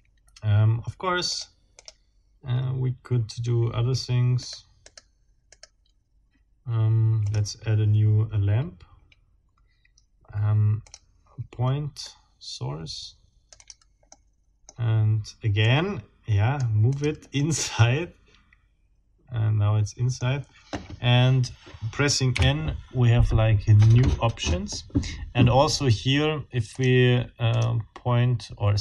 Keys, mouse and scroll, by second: 1.3 click, 1.7 click, 4.4 right click, 4.9 right click, 5.5 right click, 7.3 click, 10.8 click, 12.1-13.9 right drag, 13.6 click, 14.1 middle click, 15.6-16.8 right drag, 16.9 click, 17.4 middle click, 19.8 click, 22.3 n, 26.7 scroll up 2, 27.5-27.8 scroll up 2.